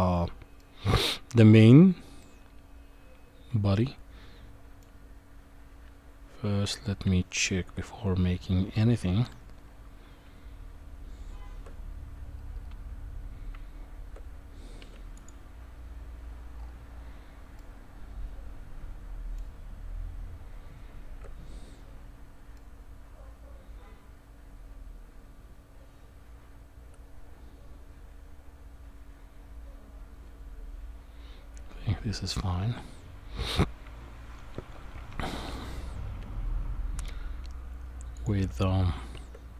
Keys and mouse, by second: 0.6 middle click, 2.2-4.8 middle drag, 5.8 Tab, 7.0 Tab, 10.2 Tab, 13.5 Tab, 14.8 q, 17.6-19.4 middle drag, 19.9 Tab, 22.6-32.3 middle drag, 33.9 Tab, 36.2 KP_1, 38.5 Tab.